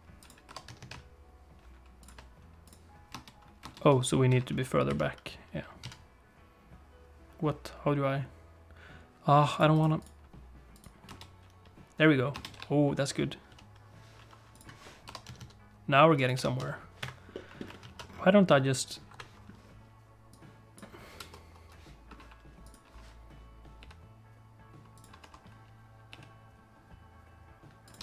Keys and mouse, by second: 0.4 r, 2.7 click, 3.1 space, 3.6 space, 4.3 g, 9.8-10.9 right drag, 11.1 space, 12.3 space, 12.5 g, 15.0 r, 16.3 g, 17.3 middle click, 19.1 KP_7, 20.3 click, 21.1 KP_0, 22.6 click, 23.8 g, 25.2 t, 26.1 g.